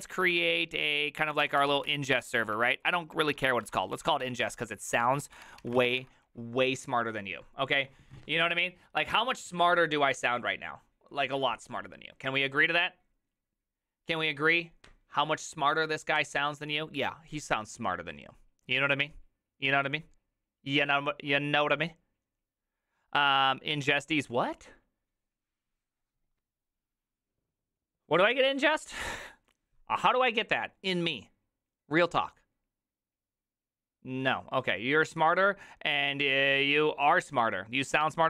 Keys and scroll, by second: 0.0-6.4 typing.